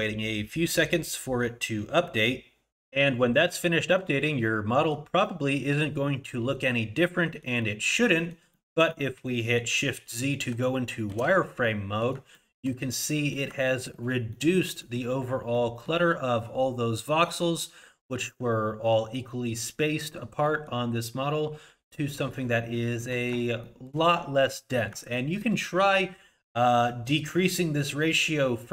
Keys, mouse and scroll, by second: 4.2 middle click, 5.2 middle click, 7.1 middle click, 7.6 middle click, 8.1 middle click, 8.5 middle click, 8.9 middle click, 9.3 middle click, 11.1 shift+z, 11.6 middle click, 12.3 shift+middle click, 12.8 scroll up 2, 13.1 middle click, 13.7 shift+middle click, 14.3 middle click, 14.8 middle click, 15.2 scroll up 2, 15.5 middle click, 20.5 middle click, 21.1 scroll down 2, 21.7 scroll up 2, 21.9-22.5 scroll down 1, 22.5 scroll down 1, 22.7 shift+middle click, 23.6 shift+middle click, 24.2-24.5 scroll up 2, 24.5 middle click, 25.1 shift+middle click.